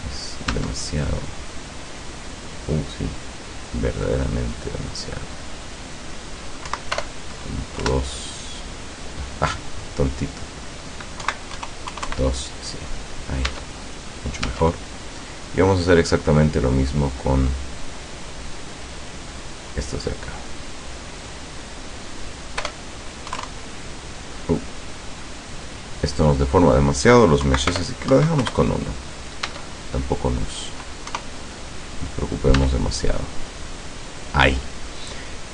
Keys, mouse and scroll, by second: 0.5 Tab, 1.1 middle click, 1.5 scroll down 1, 5.6 click, 6.8 Right, 7.1 BackSpace, 7.9 KP_Enter, 10.3 click, 11.3 Right, 11.7 KP_0, 12.0 KP_2, 13.6 Tab, 14.5 Tab, 15.3 right click, 17.4 click, 18.8 click, 21.2 click, 21.8 click, 22.7 BackSpace, 23.4 KP_2, 26.2 click, 27.5 Right, 27.8 BackSpace, 28.2 KP_1, 28.5 KP_Enter, 29.5 Tab, 31.1 KP_0, 32.6 Tab.